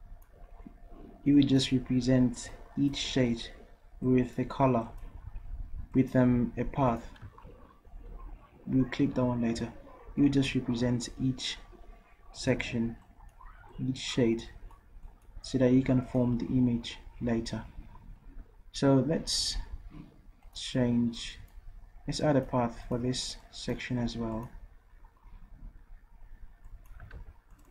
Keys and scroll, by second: 27.1 ctrl+z.